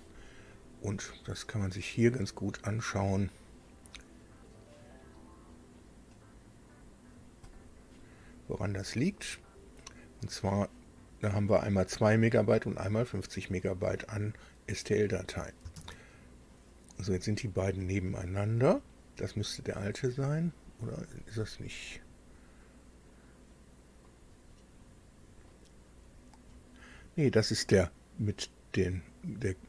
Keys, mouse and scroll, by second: 2.9 click, 4.1-4.5 scroll down 2, 5.8 scroll up 2, 6.6 click, 7.3 click, 8.5-8.9 scroll down 2, 9.2 scroll down 2, 15.8 alt+Tab, 16.9-17.4 scroll up 2, 17.6-18.8 scroll up 6, 18.9 scroll up 2, 19.6-20.7 scroll down 6, 21.8 click, 23.8-25.7 middle drag, 25.7-26.1 scroll up 2, 26.2-27.0 scroll up 4, 29.2-29.6 scroll down 2.